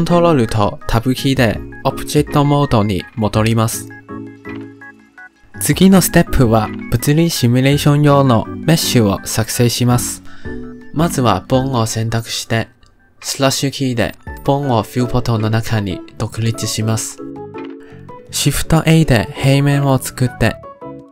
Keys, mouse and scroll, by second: 0.8 ctrl+Tab, 5.6 click, 15.1 /, 16.7-17.3 middle drag, 17.3-17.7 scroll down 2, 17.7-18.6 middle drag, 18.6 shift+a, 19.7-20.6 shift+middle drag, 20.6-21.1 drag.